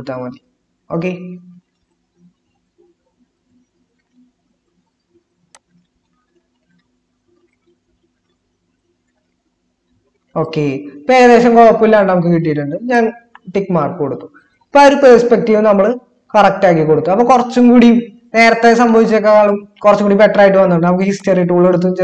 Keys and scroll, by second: 15.0 ctrl+-.